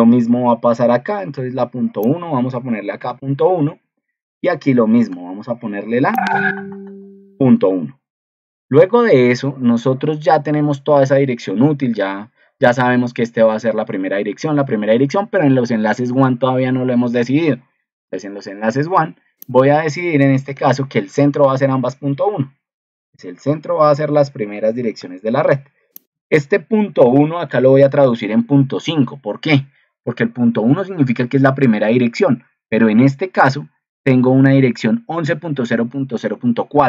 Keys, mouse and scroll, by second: 33.5 ctrl+2.